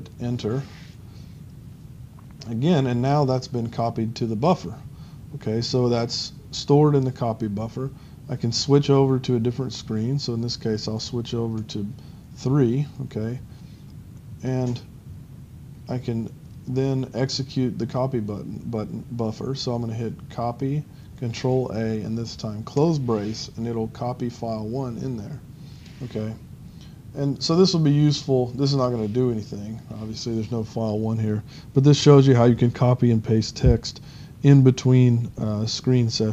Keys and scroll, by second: 0.3 Return, 11.6 ctrl+3, 22.8 ctrl+], 23.1 ctrl+].